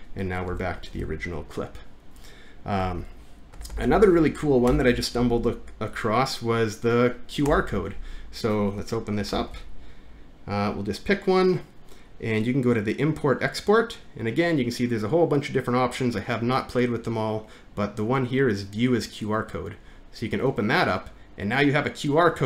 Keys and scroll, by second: 0.5 Return, 1.0 ctrl+v, 2.9 Home, 3.6 Up, 3.7 Up, 4.0 Up, 4.7 BackSpace, 7.5 BackSpace, 9.4 alt+`.